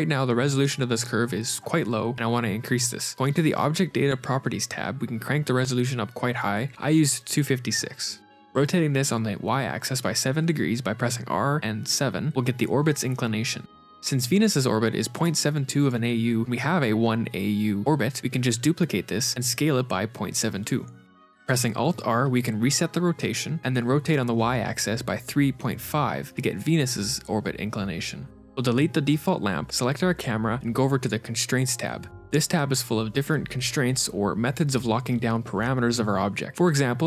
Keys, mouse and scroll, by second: 1.6 middle click, 5.2 click, 6.5 click, 8.2 r, 11.6 middle click, 17.8 shift+d, 17.8 s, 20.5 middle click, 21.3 alt+r, 22.2 r, 27.0 middle click, 28.3 KP_Divide, 28.3 scroll down 4, 28.8 click, 29.2 x, 29.5 click, 30.8 click, 31.7 click.